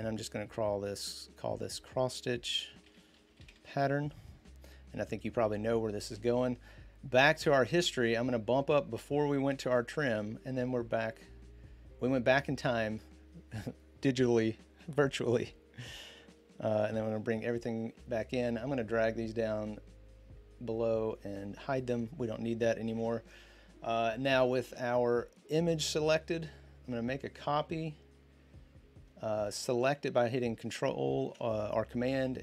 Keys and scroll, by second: 2.4-4.2 typing, 16.6 ctrl+0, 22.7 ctrl+d.